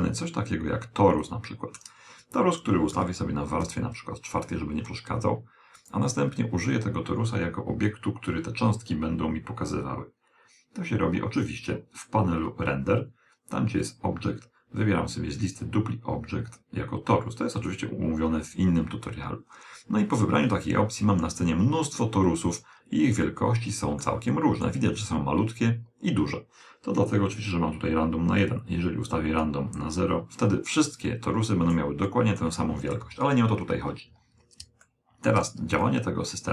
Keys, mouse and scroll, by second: 2.9 m, 5.7-7.5 right drag, 11.3-13.2 middle drag, 13.8-17.2 drag, 19.4-22.4 middle drag, 22.4 scroll down 1, 23.0-25.8 middle drag, 28.1 click, 30.8-33.6 middle drag, 32.7 KP_1, 33.6 scroll down 1, 34.2 scroll down 1, 34.6-36.5 middle drag.